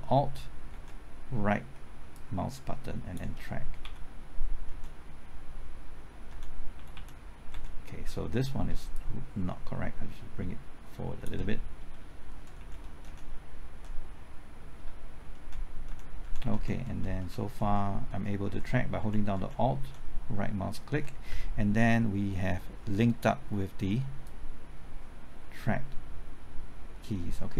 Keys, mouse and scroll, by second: 0.7 alt+Right, 2.1-3.5 drag, 3.8 Left, 4.6 Right, 6.3 Right, 6.7-7.5 typing, 8.9-11.2 shift+drag, 12.2 shift+Left, 12.5 Right, 12.5-13.0 typing, 15.4 alt+Right, 15.9 typing, 16.2 alt+Right, 16.8 alt+Right, 24.2-27.5 drag.